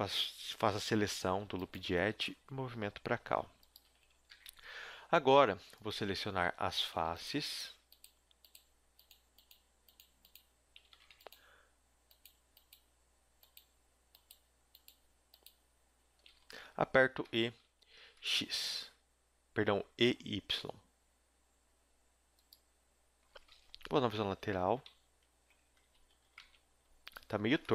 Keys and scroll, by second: 2.1 g, 3.7 a, 4.3 ctrl+Tab, 11.0 ctrl+z, 17.2 e, 23.8 KP_3, 24.3 z, 25.9 a, 26.4 ctrl+Tab.